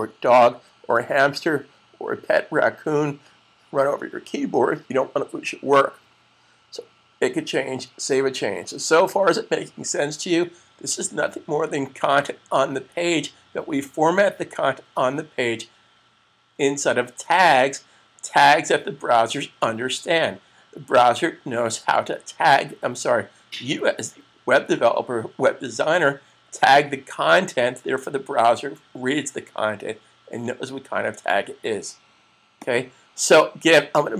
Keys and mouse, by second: 32.5 click.